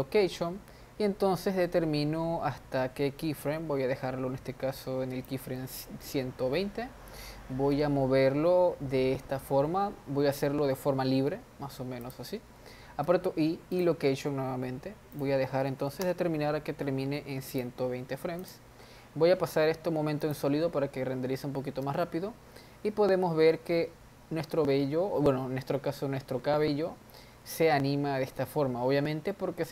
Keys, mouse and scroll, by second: 1.5-4.6 drag, 7.7 g, 13.1 i, 15.2-18.6 drag, 19.5 z, 21.4-22.0 scroll up 1, 22.0 space.